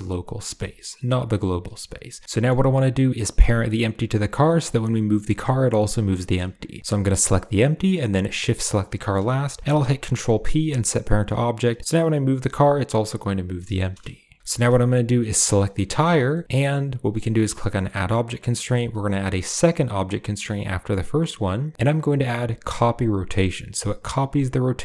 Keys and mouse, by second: 0.1 click, 0.3 shift+middle click, 1.5 shift+middle click, 2.1 middle click, 3.4 click, 3.9 click, 4.6 g, 6.9 click, 8.4 shift+drag, 9.6 ctrl+p, 11.8 g, 13.6 shift+drag, 15.6 shift+drag, 16.2 shift+drag, 17.6-24.5 drag, 21.7 typing.